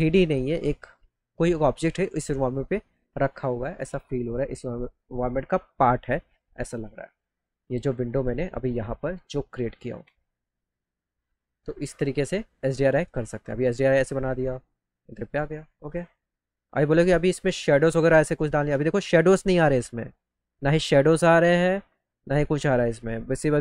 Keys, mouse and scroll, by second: 7.5-8.8 alt+middle drag, 9.2 alt+middle click, 10.1 middle click, 15.3 click, 21.4 middle click.